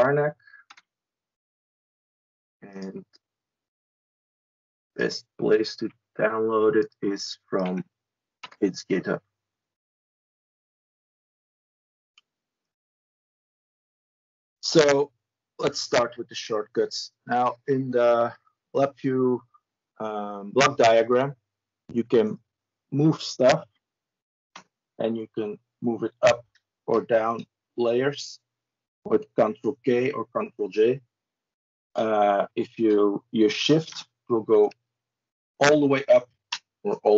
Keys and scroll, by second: 0.4 Return, 5.6 ctrl+c, 7.4 ctrl+v, 8.2 Return, 13.0 ctrl+e, 26.2 ctrl+j, 33.6 ctrl+k, 36.4 ctrl+shift+j.